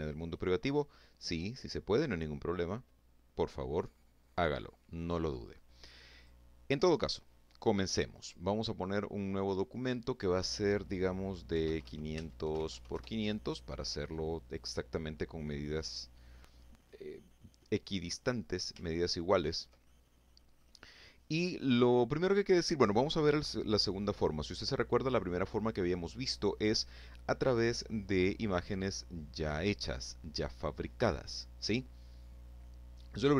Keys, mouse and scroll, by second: 4.4 click, 6.5 click, 8.3 click, 9.8 KP_5, 10.0 KP_0, 10.5 Tab, 10.7 KP_5, 10.8 KP_0, 11.2 KP_Enter, 17.2 ctrl+scroll up 2, 17.8-18.1 ctrl+scroll down 2, 18.1 ctrl+middle click.